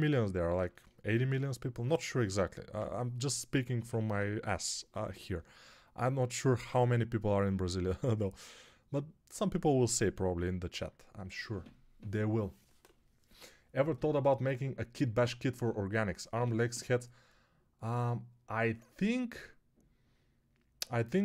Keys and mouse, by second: 3.6 ], 3.8 ], 3.9 ].